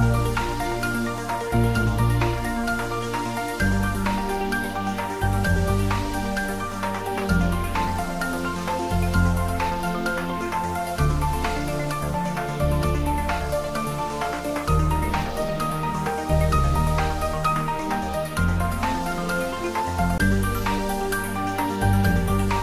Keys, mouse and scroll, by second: 0.5 shift+d, 0.8 x, 2.9 click, 3.2 scroll down 1, 4.1-6.6 middle drag, 6.6 g, 6.9 y, 8.2 x, 9.9 click, 10.6 shift+z, 11.1 scroll down 1, 11.9-13.4 middle drag, 13.4 scroll down 1, 14.3 scroll up 1.